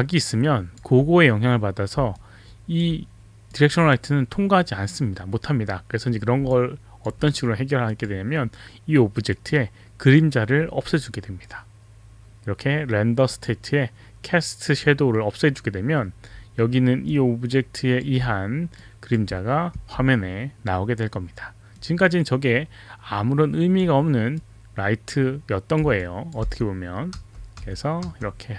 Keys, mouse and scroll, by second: 2.1 alt+click, 3.6 click, 6.5 alt+click, 7.9-8.8 drag, 9.3-10.2 drag, 13.3 click, 14.7 click, 17.1 alt+click, 18.8 drag, 19.7 e, 21.7 click, 24.3 click, 26.0 alt+click, 26.4-28.5 typing.